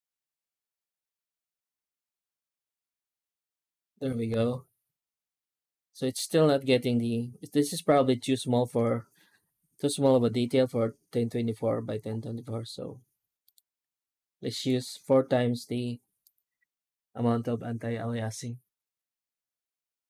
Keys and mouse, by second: 6.2 middle click, 13.3-14.5 drag, 16.1-20.0 drag.